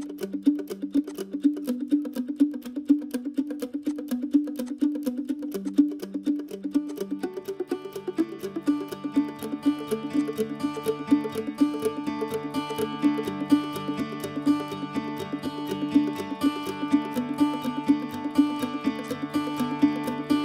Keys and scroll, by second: 0.2 q, 1.3-3.3 typing, 9.4 q, 15.7 m.